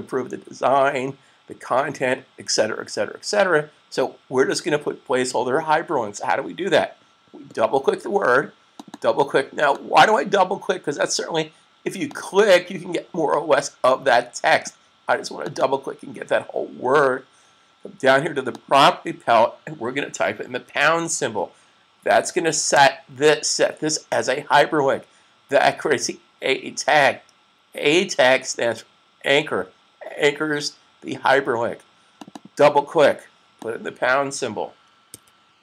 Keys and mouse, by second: 8.5 click, 8.9 double click, 9.6 click, 11.9 click, 14.3 click, 15.5 double click, 18.2 click, 20.5 shift+3, 31.9 click, 32.3 double click, 33.5 click, 34.9 super+3.